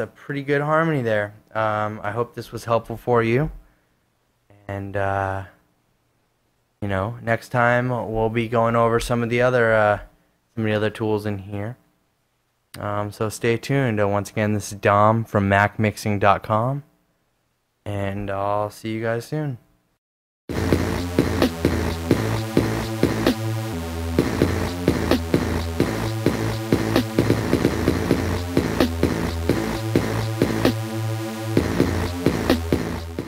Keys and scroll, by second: 2.5 super+Tab, 4.5 super+`.